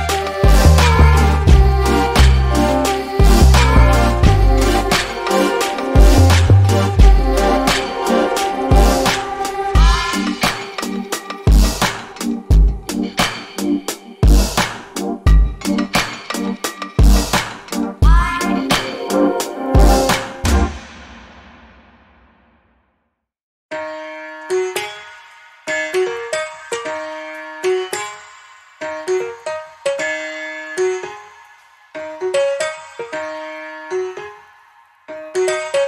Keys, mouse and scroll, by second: 4.3 double click, 4.7 scroll down 1, 4.9 alt+click, 6.3 alt+middle click, 6.7 alt+click, 7.9 scroll down 1, 8.4 alt+click, 9.2 scroll down 1, 9.8 alt+scroll down 1, 10.0 alt+middle click, 10.5 alt+click, 12.0 alt+middle click, 12.4 alt+click, 15.3 alt+middle click, 16.3 scroll down 1, 16.6 middle click, 17.4 scroll up 1, 17.9 middle click, 19.0 click, 27.4 double click, 28.3 click, 28.6 BackSpace, 28.9 click, 31.3 click, 31.6 double click, 32.9 BackSpace, 33.2 click, 33.7-34.0 scroll up 1, 34.3 click, 35.1 scroll up 1.